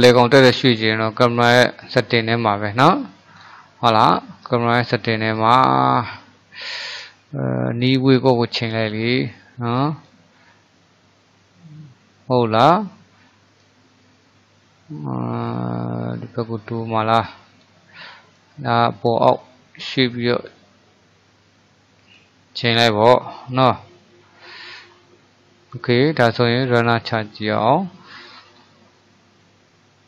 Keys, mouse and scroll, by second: 3.4 click, 4.0 click, 7.0-10.2 drag, 13.7-16.7 drag, 18.4-21.5 drag, 24.5 click, 26.6-27.9 drag.